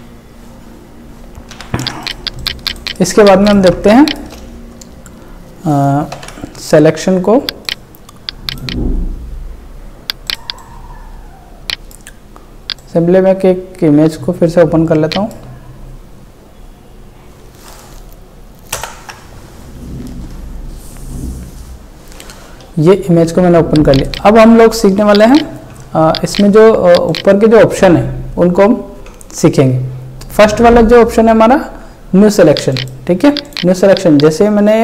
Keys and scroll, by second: 1.5 ctrl+d, 1.9 ctrl+space, 4.3 space, 6.1 ctrl+w, 15.0 space, 18.8 ctrl+Delete.